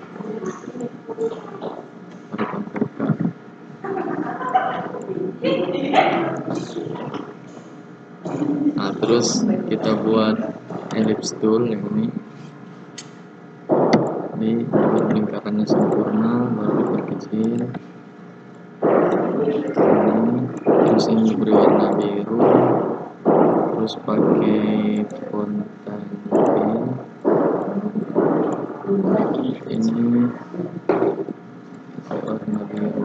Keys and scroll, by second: 3.0 ctrl+k.